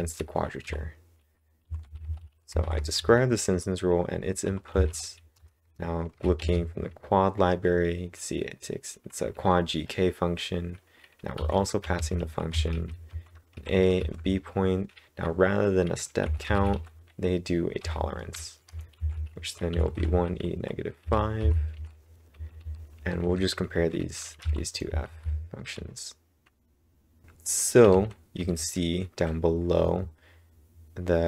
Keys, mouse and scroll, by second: 0.0-3.1 typing, 5.3 Return, 6.3 shift+(, 11.1-14.4 typing, 16.0-18.9 typing, 21.0-24.8 typing, 25.1 ctrl+', 27.2 ctrl+1, 27.2 Return, 27.2 Tab, 27.2-28.8 typing.